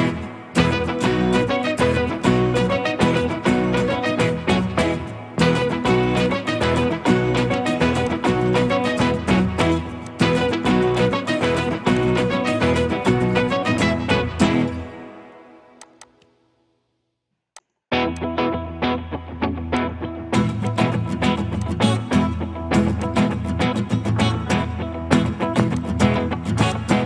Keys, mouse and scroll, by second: 6.9 right click, 13.5 middle click, 14.2 scroll up 1, 14.8-15.8 scroll down 1, 16.0 double click, 17.1 2.